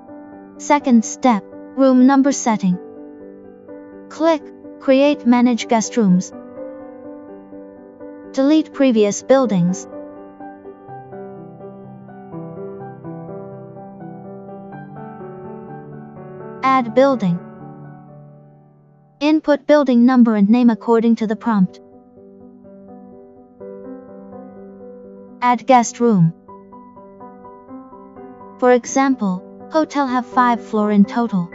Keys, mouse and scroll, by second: 7.4 click, 11.1 click, 13.2 click, 14.2 click, 17.6 click, 20.6 Return, 23.8 Return, 28.3 click, 29.7 click.